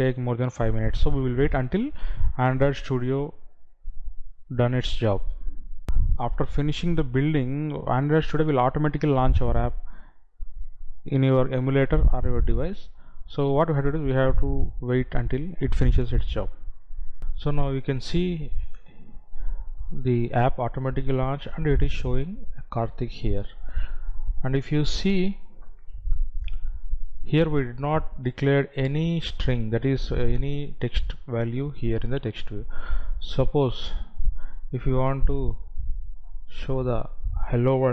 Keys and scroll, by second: 6.0 F9, 17.3 F9.